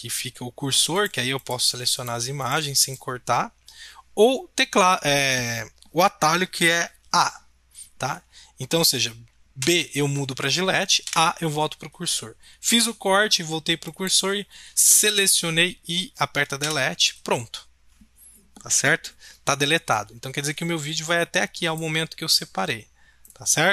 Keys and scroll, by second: 9.6 b, 11.0 a, 16.2 a, 16.6 Delete.